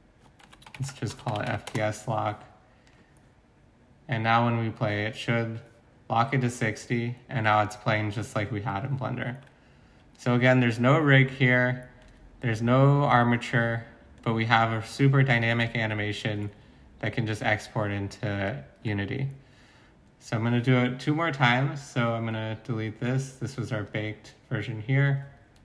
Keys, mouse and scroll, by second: 0.4-1.5 typing, 1.7 Return, 23.1 x.